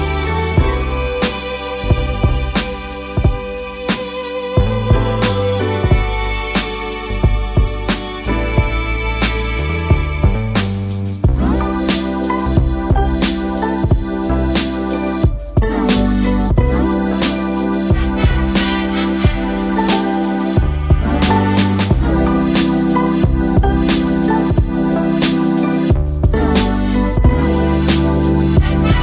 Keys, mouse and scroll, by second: 4.4-4.8 alt+scroll up 1, 5.1 space, 5.3 click, 5.6 space, 6.4-11.3 drag, 11.3 Delete, 12.2-22.2 drag, 24.5 click, 24.9-25.4 alt+scroll down 1, 25.9-26.3 alt+scroll down 1, 26.9 space, 27.2 click, 27.4 space.